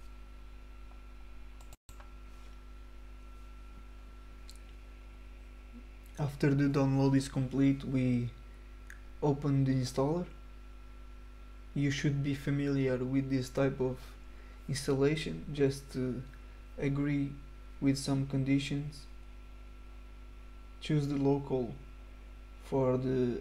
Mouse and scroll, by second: 0.0 click, 4.2 click.